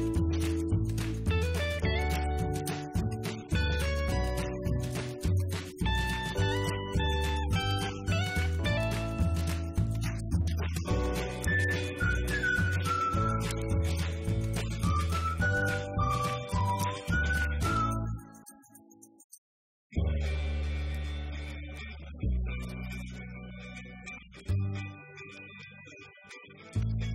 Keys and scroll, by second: 11.9 Right, 12.1 Up, 12.6 Left, 12.8 Down, 13.9 Right, 14.0 Left, 16.9 alt+=, 24.5 Return, 25.3 Up, 25.8 Left, 26.6-27.1 typing.